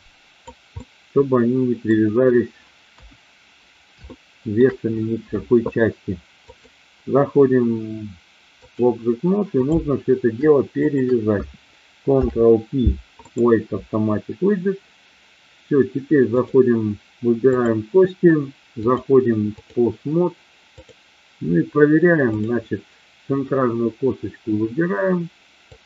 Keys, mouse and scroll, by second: 0.8-1.8 middle drag, 2.9 KP_1, 4.0 shift+middle click, 6.5-8.8 drag, 10.8 shift+click, 12.0 ctrl+p, 16.3-16.8 drag, 18.8-19.6 drag, 20.6-21.6 drag, 22.3-23.1 drag, 25.6-25.8 drag.